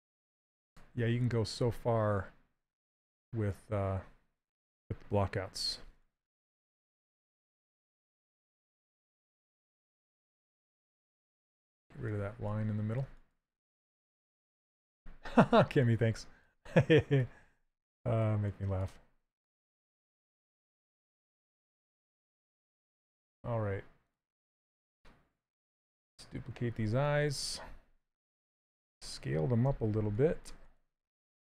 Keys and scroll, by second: 5.6 s, 15.1 s, 21.6 shift+f, 28.7 s, 29.3 w.